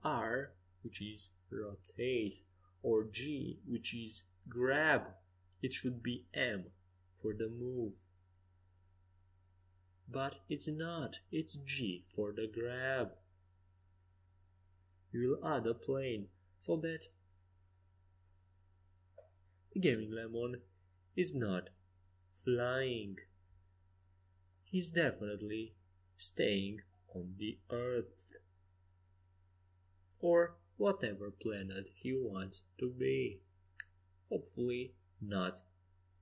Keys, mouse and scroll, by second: 4.0 g, 10.7-12.6 drag, 11.5 shift+a, 16.8 s, 18.5-20.3 drag, 21.6 middle click, 22.4-24.1 middle drag, 25.9 middle click, 30.0-32.1 drag, 30.0 middle click, 32.1-33.7 middle drag, 33.7 KP_0, 35.0 middle click.